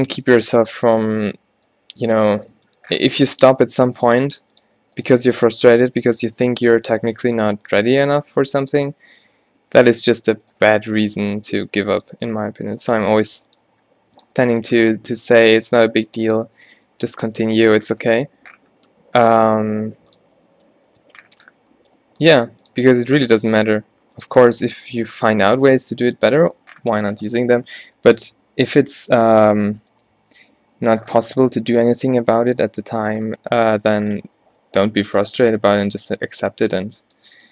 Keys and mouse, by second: 0.0 g, 3.5 r, 4.3 g, 4.6 click, 4.8 r, 8.5 r, 9.9 ctrl+z, 10.9 middle click, 11.5 g, 13.0 g, 13.8 r, 16.0 g, 16.3 click, 17.8-19.0 middle drag, 19.1 e, 20.0 click, 22.3 g, 23.1 middle click, 23.8 g, 24.5 g, 27.8 Tab, 33.3 middle click, 34.5 Tab, 35.8-37.3 middle drag, 37.3 g.